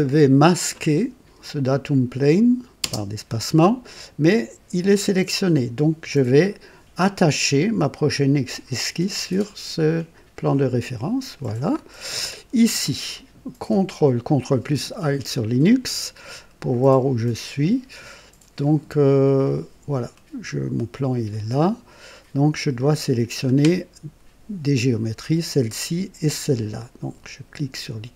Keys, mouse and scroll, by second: 1.6 click, 2.8 space, 10.5 click, 11.7 scroll up 2, 12.1 right click, 15.9-23.7 ctrl+alt+drag.